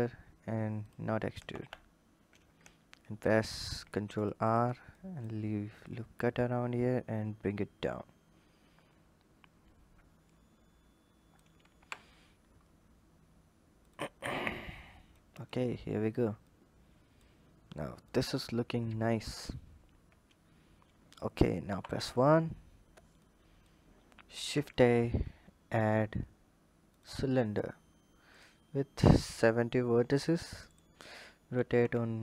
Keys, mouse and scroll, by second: 1.2 ctrl+z, 3.1 ctrl+r, 4.7 click, 5.7 click, 11.6 Tab, 11.9-13.6 scroll down 8, 13.6 click, 14.3 click, 15.1 click, 16.2-18.0 drag, 21.5 KP_1, 23.0 click, 23.8-24.5 scroll up 3, 24.5 shift+a, 28.1-30.2 drag, 30.4 click, 31.4 r.